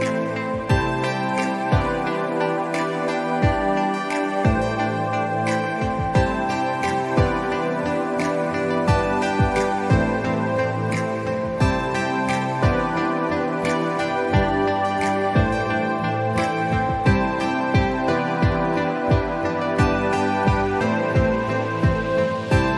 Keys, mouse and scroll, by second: 1.5 ctrl+z, 2.1 alt+scroll up 1, 3.1 typing, 3.8-8.1 drag, 8.1 scroll down 1, 8.7-12.6 drag, 13.0 scroll up 1, 13.2 alt+scroll down 2, 13.9 scroll up 1, 14.9-21.8 drag, 21.8-22.1 scroll down 1, 22.1 scroll up 1.